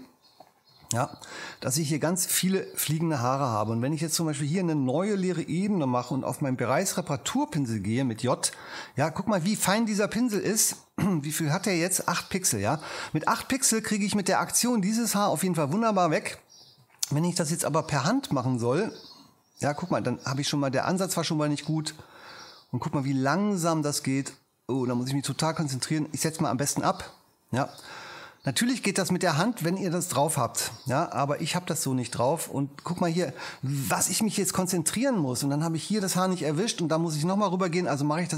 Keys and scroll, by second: 5.0 shift+super+n, 5.7 shift+super+Return, 6.2 super+Return, 7.4 j, 16.6 ⟲.